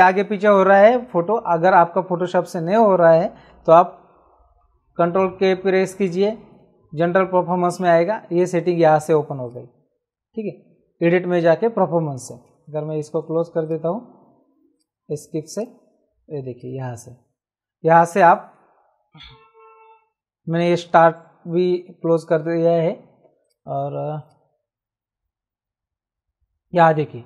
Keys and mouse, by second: 4.1 ctrl+k, 9.4 click, 12.4 Escape, 13.6 click, 14.7 click, 23.4 click.